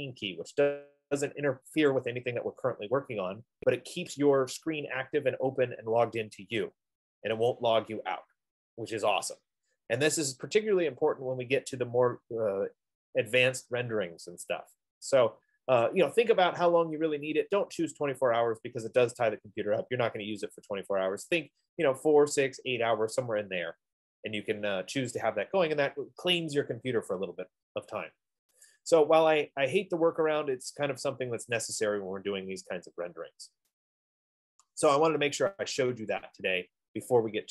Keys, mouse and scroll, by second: 29.1-34.0 drag, 30.2 F15.